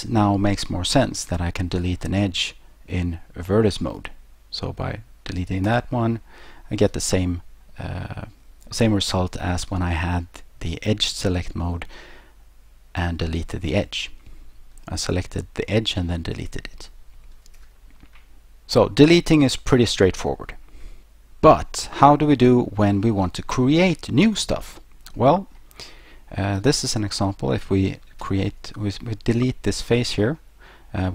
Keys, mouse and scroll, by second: 5.7 click, 17.4 ctrl+z, 24.3 click, 25.2 middle click, 26.6 right click, 28.2 Delete, 29.8 click, 30.4 click.